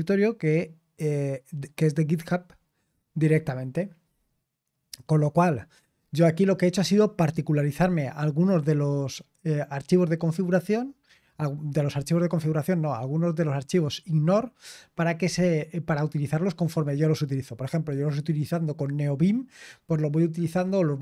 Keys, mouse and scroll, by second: 0.9-1.6 scroll up 1, 1.6-4.0 scroll up 1, 4.0-5.1 scroll up 1, 5.1-5.7 scroll up 1, 5.7-7.1 scroll up 1.